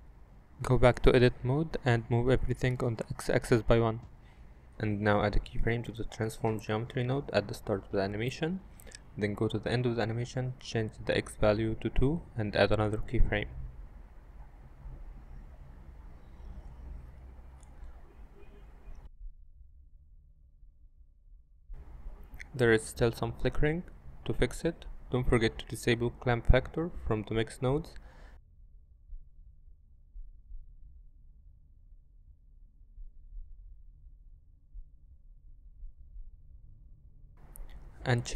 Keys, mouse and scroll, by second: 1.7 Tab, 2.1 a, 3.5 g, 3.8 x, 5.5 KP_1, 6.0 click, 6.3 Tab, 9.8 i, 10.4-11.4 drag, 10.6 KP_0, 10.6 BackSpace, 11.1 KP_9, 12.5 click, 13.5 click, 14.6 i, 15.8 click, 18.3 click, 18.8 shift+space, 19.2 middle click, 20.5-21.0 middle drag, 23.5 shift+space, 27.4 click, 28.1 click, 31.3 middle click, 32.8 click, 33.6 shift+space, 36.8 click.